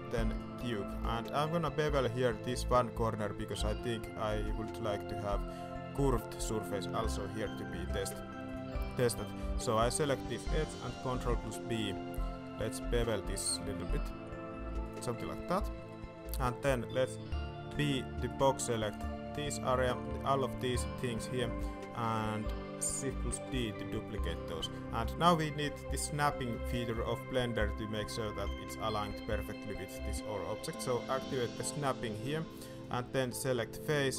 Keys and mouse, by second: 1.0 middle click, 1.7 middle drag, 3.8 middle click, 4.5 shift+middle click, 6.7 middle drag, 7.9 Tab, 8.4 click, 11.2 ctrl+b, 15.0 Tab, 15.4 middle drag, 15.7 shift+middle click, 16.2 alt+a, 17.7 b, 19.8 middle click, 21.1 middle drag, 21.6 shift+middle drag, 23.4 shift+d, 24.6 shift+middle click, 28.1 middle click, 32.9-34.1 drag.